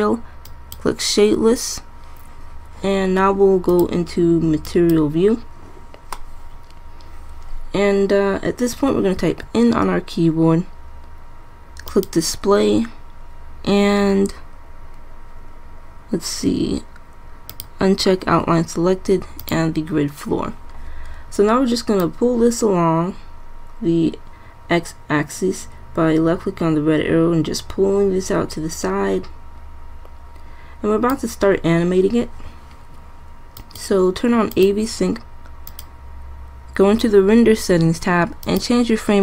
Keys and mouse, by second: 0.2 click, 0.7-2.5 drag, 9.3 n, 13.8-17.6 middle drag, 21.3-22.2 middle drag, 35.5 middle click, 37.7 middle click.